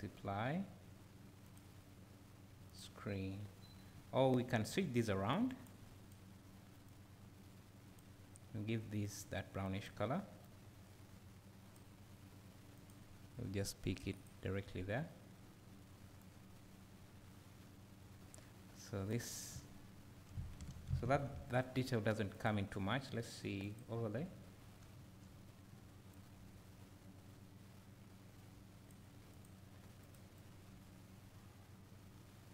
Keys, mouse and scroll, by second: 16.4-30.0 drag, 19.6 `, 25.0 `, 30.4-32.5 drag.